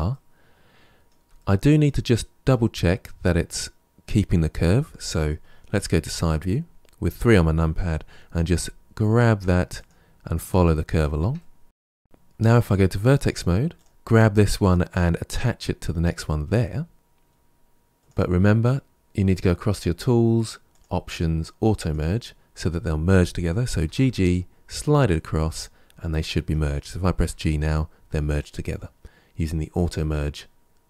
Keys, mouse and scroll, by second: 0.0-4.8 middle drag, 5.9 KP_3, 8.4 g, 11.2 middle click, 12.0 1, 13.6 click, 18.0 click, 20.6 click, 21.6 click, 23.7 g, 27.1 g.